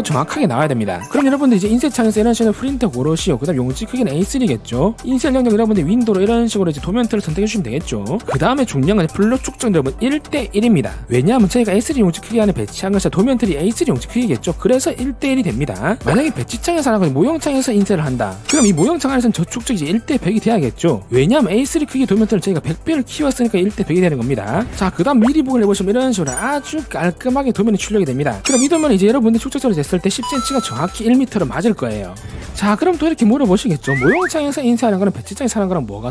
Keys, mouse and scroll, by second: 7.0 click, 17.8 click, 26.0 click.